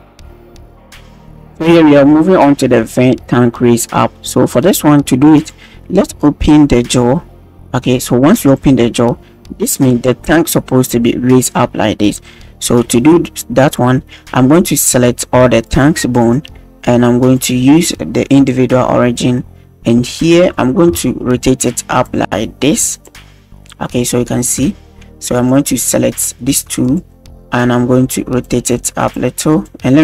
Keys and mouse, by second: 0.3 alt+a, 0.4 alt+g, 0.4 alt+r, 0.4 alt+s, 0.5 click, 5.4 click, 6.6 click, 12.9-13.3 drag, 13.7 right click, 14.1-15.0 drag, 15.0 middle click, 15.7 shift+right click, 16.2 shift+right click, 17.4-18.5 drag, 19.0 middle drag, 20.1 middle drag, 21.0 shift+middle drag, 22.1 click, 23.3 middle click, 23.5 click, 23.6 middle click, 24.0-24.4 middle drag, 24.8 shift+drag, 25.3 click, 25.9-26.2 middle drag, 26.5 middle click, 26.8 shift+click, 27.1-27.5 middle drag, 28.4 click, 29.5 click.